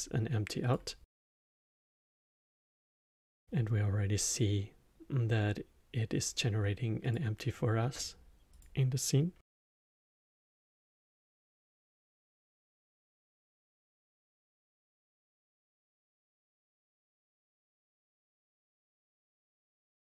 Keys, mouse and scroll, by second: 1.1-5.3 middle drag, 7.0 click, 8.5 click, 11.2-14.0 drag.